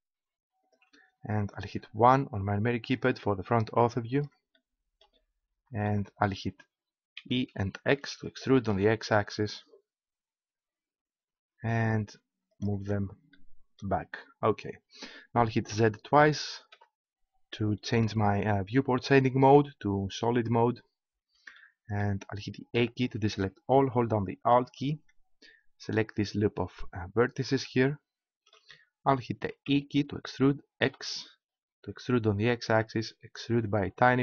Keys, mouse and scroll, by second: 0.7-1.8 drag, 1.8 KP_1, 7.2 e, 12.6-14.7 drag, 15.7 z, 16.7 z, 21.7-22.8 middle drag, 22.8 a, 24.8-26.7 right drag, 28.8 middle click, 29.6 e, 33.6-34.2 drag.